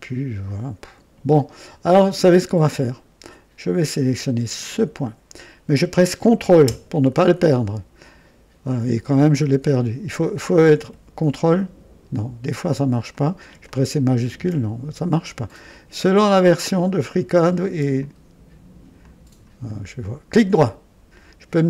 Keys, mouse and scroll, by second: 1.1 Escape, 2.1 click, 4.8 click, 7.5-8.8 ctrl+drag, 10.2 click, 11.4-12.2 ctrl+drag, 13.1 click, 13.6-14.6 shift+drag, 15.5 click, 17.1 click, 17.9-18.9 ctrl+drag, 19.0-19.5 ctrl+drag, 19.6-20.6 ctrl+right drag.